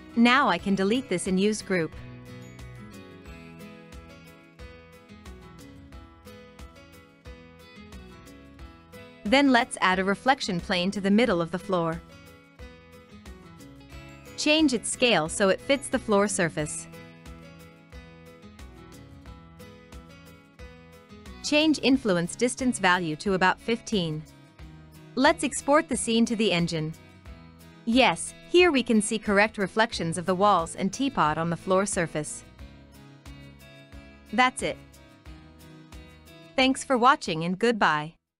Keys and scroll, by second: 1.6 Delete, 11.5 e, 12.0 w, 13.4 r.